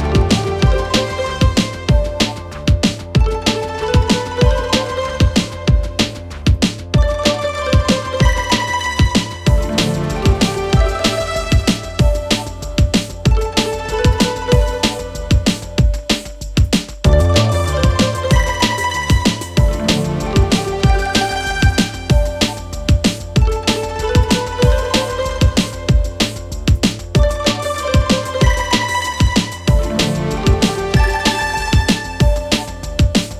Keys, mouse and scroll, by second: 3.8 u, 5.8-6.9 click, 8.3 alt+], 10.3 click, 12.4 ctrl+d, 17.2 click, 19.3-19.8 click, 22.1 click, 26.7 click, 29.8 click, 32.6 click.